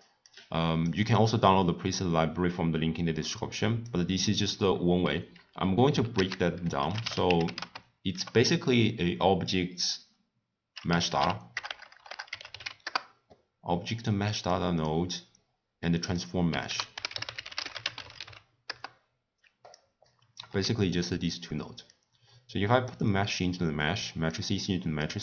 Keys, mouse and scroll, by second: 13.1 BackSpace, 18.9 ctrl+a, 20.8 x, 23.2 click.